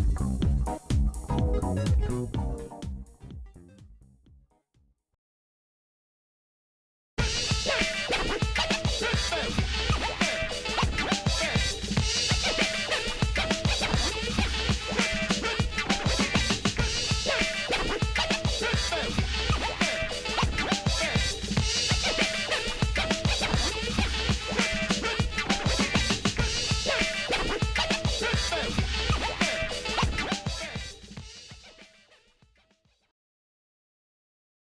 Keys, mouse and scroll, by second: 0.7 shift+click, 1.1 shift+click, 2.2 g, 3.9 Tab, 4.2-4.8 scroll down 3, 5.5 click, 6.0 shift+middle click, 6.6 scroll down 1, 6.9 middle click, 7.2 scroll down 1, 7.4 scroll up 1, 7.5 scroll down 1, 8.1 scroll down 1, 8.3 shift+middle click, 8.9 middle click, 9.6 shift+d, 12.4-13.5 scroll up 6, 13.6-14.0 scroll down 1, 14.1 shift+middle click, 15.7 g, 28.3 shift+middle click, 30.0 g, 33.6-34.7 shift+middle drag.